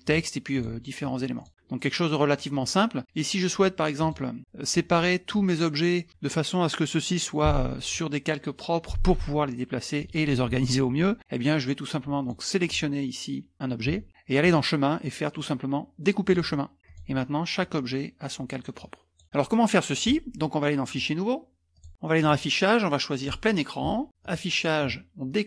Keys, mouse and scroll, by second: 0.0 click, 1.3 click, 1.8 middle click, 1.8-2.8 scroll up 3, 1.9 middle click, 2.0 middle click, 4.0 click, 12.2-13.2 drag, 14.4 click, 16.3 click, 16.8 click, 17.6-19.3 drag, 20.9 click, 21.7 click, 22.2 click, 23.2 click, 23.6 click, 24.2 click.